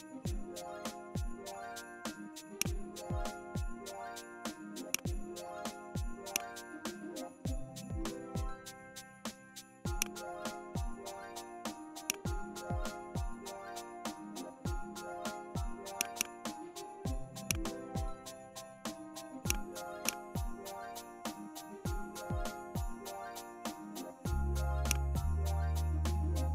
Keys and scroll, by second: 5.4 Up, 7.3 KP_7, 7.5 KP_0, 7.7 KP_0, 8.3 Return, 13.1 KP_8, 13.4 KP_0, 14.1 Return, 21.0 KP_1, 21.1 KP_0, 21.8 KP_0, 22.4 Return, 25.3 Up, 26.4 Down.